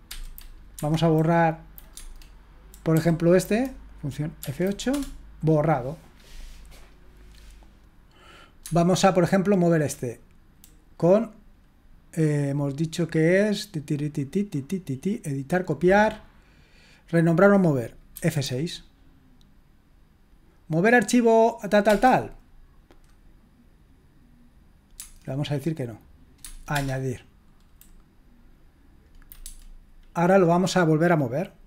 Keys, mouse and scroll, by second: 0.1 F8, 0.8 Escape, 1.9 Tab, 2.9 Down, 4.4 F8, 4.9 Return, 8.6 Tab, 18.1 F6, 21.8 Return, 25.0 Tab, 26.4 Tab, 26.7 Return, 29.4 Tab.